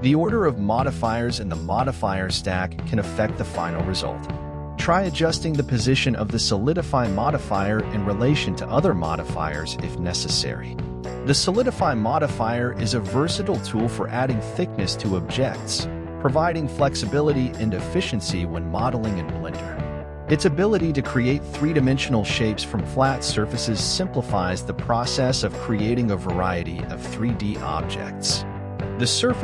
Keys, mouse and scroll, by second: 0.1-2.9 scroll down 5, 5.5-6.9 drag, 15.0-17.9 middle drag, 17.9 KP_1, 23.0-26.3 drag.